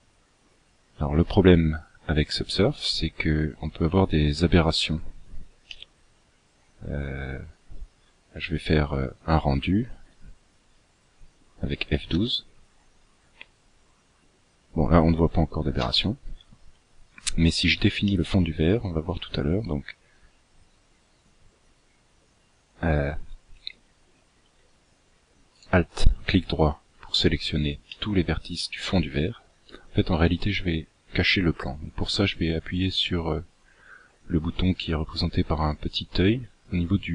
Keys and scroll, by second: 15.5 Escape.